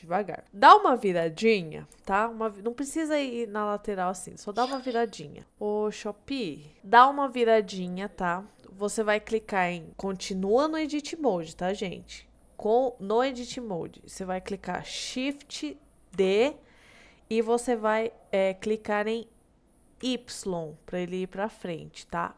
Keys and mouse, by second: 0.6-1.6 middle drag, 2.1 shift+middle click, 2.6-4.5 middle drag, 5.0 shift+middle click, 6.8-8.4 middle drag, 16.2 shift+d, 20.1 y.